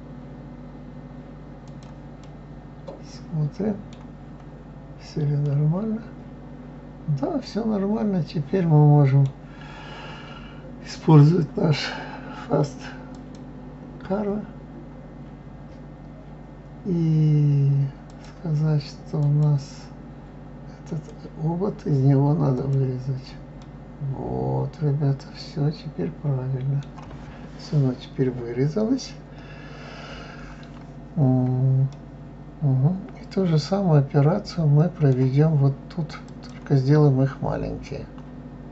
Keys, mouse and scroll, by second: 2.2-4.2 middle drag, 4.2 scroll up 1, 5.4-8.6 middle drag, 13.1 click, 18.1 click, 19.2 click, 22.5 click, 23.6-26.6 middle drag, 31.1 scroll up 2, 31.9-35.0 middle drag, 36.2 click, 36.9-37.7 scroll down 4, 37.7-38.1 scroll up 2, 38.4 scroll down 2.